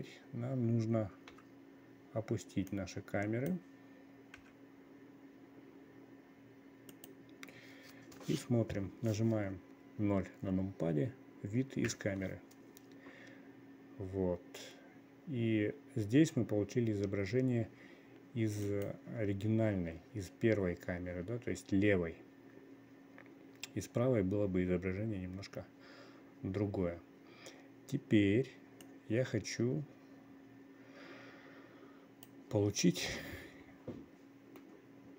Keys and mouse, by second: 1.8 n, 3.2-7.5 drag, 4.9 g, 12.4 KP_0, 19.2 click, 29.4-33.0 drag.